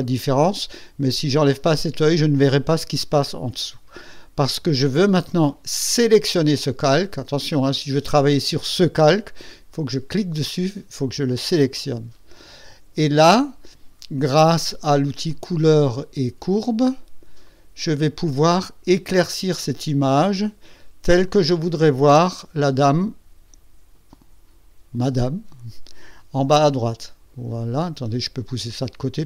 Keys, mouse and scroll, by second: 0.1 click, 5.9 click, 15.2 click, 17.4 click, 17.6 click, 19.0 click, 21.2-27.9 drag, 28.6 click, 28.9-29.2 drag.